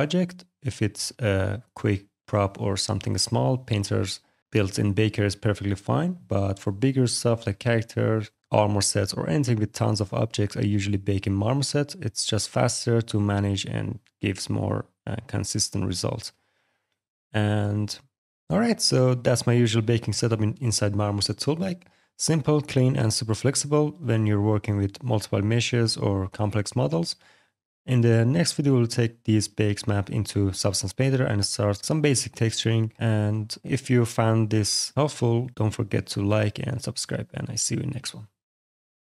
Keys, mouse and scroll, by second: 0.2 click, 5.9 click, 6.9 click, 7.7 alt+click, 8.3 click, 9.1 click, 13.4 click, 14.0-14.9 scroll, 14.9 scroll, 15.8-16.2 scroll, 16.9-18.9 scroll, 22.5 alt+click, 23.3 middle click.